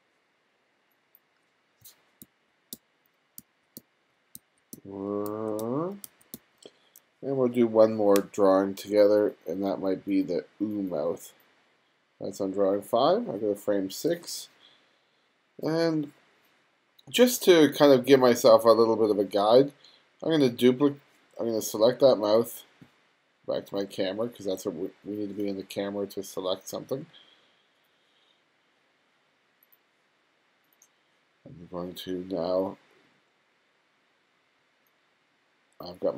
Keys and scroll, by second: 2.3-6.9 typing.